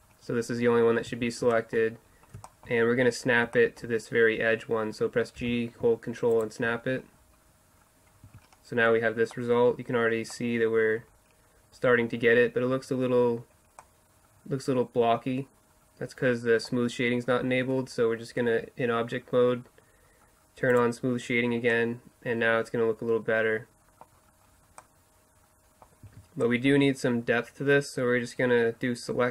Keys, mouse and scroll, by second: 0.0 middle click, 1.1 z, 1.6 middle click, 2.5 middle click, 5.4 g, 6.8 middle click, 8.3 Tab, 13.8-14.2 middle drag, 14.4-15.8 middle drag, 18.5 scroll up 1, 20.7-21.7 drag, 21.7-23.3 middle drag, 23.4-23.8 middle drag, 24.2-26.1 middle drag, 26.1 Tab.